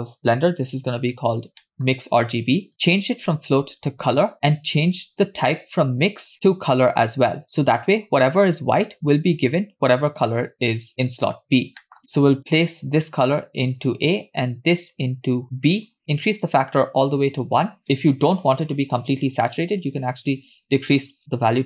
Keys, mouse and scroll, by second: 1.1-1.6 scroll up 3, 1.6 middle click, 2.7-4.2 drag, 5.6-6.1 scroll up 1, 6.2 click, 11.5 scroll down 2, 11.9 middle click, 12.8-13.8 drag, 15.0-16.0 drag, 16.3-17.5 drag, 19.8-21.6 drag.